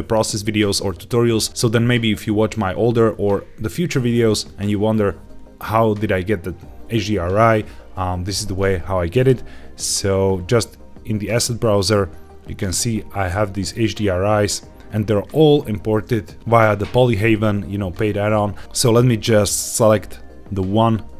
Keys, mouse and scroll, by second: 9.1-11.4 drag, 12.5 click, 13.7 click, 18.8-20.5 drag.